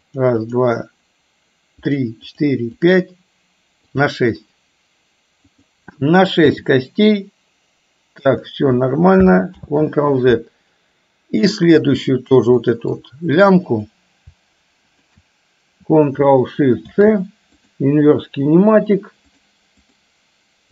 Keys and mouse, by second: 2.0 click, 2.4 click, 5.5 click, 6.5 g, 9.6 ctrl+z, 11.5 click, 12.8 middle click, 13.8 click, 15.1 shift+drag, 20.0 click.